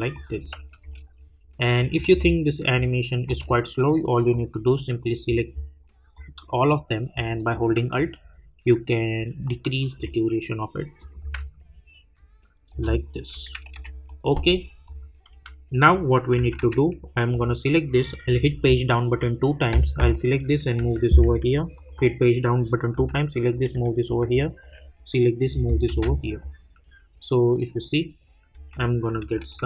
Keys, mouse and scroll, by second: 0.0 space, 0.1 click, 0.4 space, 1.8 click, 2.1 space, 4.3-7.9 drag, 7.9 alt+click, 9.0 alt+-, 11.0 click, 11.2 space, 13.3 -, 14.0 click, 15.3-17.0 typing, 17.3 click, 18.6 Page_Down, 19.9 click, 20.7 [, 21.7 click, 22.9 [, 24.2 click, 24.6 [, 28.5 space.